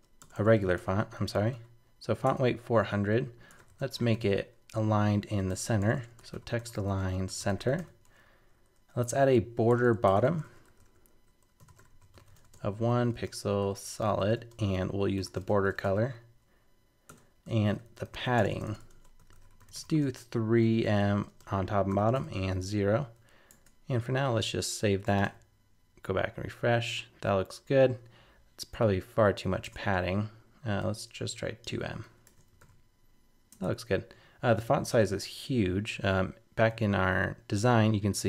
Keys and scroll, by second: 23.5 super+Tab, 25.2 super+r, 29.6 super+Tab, 32.0 super+s, 32.2 super+Tab, 32.6 super+r, 33.5 super+Tab.